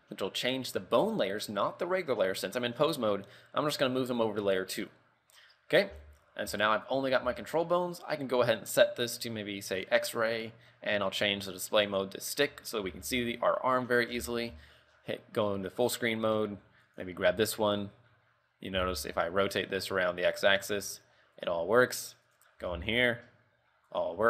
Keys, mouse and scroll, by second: 6.1 z, 6.6 z, 7.0 right click, 7.4 z, 7.6 middle click, 9.9 click, 11.1 scroll down 1, 12.0 click, 12.6 KP_3, 13.0 a, 13.3 shift+middle click, 13.7 scroll up 2, 14.1 middle click, 14.8 shift+space, 15.1 shift+middle click, 15.3 scroll down 4, 16.8 scroll up 1, 17.0 middle click.